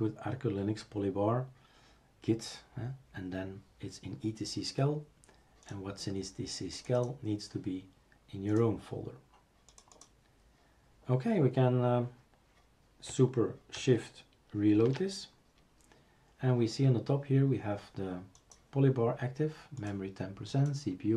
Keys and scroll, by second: 14.8 shift+super+r.